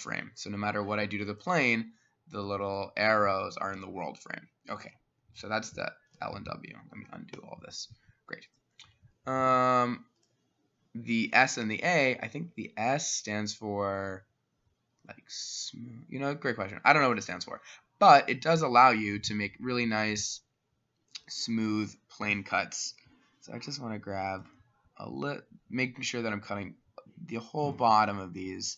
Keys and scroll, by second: 4.8 ctrl+z, 5.6 ctrl+z, 6.2 ctrl+z, 6.9 Escape, 7.4 Escape.